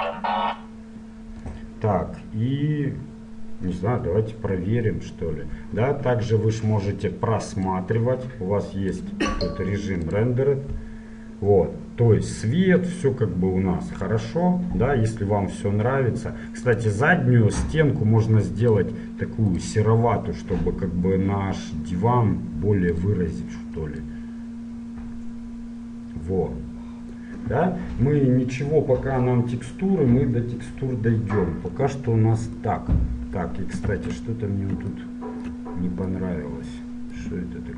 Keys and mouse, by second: 7.8-10.9 drag, 16.9-18.8 right drag, 19.0-21.5 drag, 23.1-25.0 drag, 34.1 shift+z, 34.6 middle click, 35.3 middle click, 36.6 click.